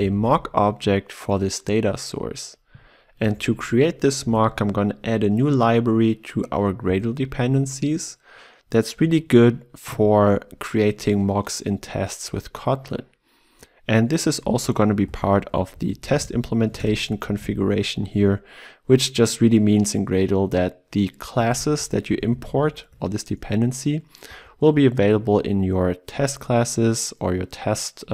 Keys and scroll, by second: 4.1 ctrl+w, 4.4 ctrl+e, 15.1 ctrl+d, 16.2 ctrl+e, 17.2 ctrl+w, 22.4 ctrl+w.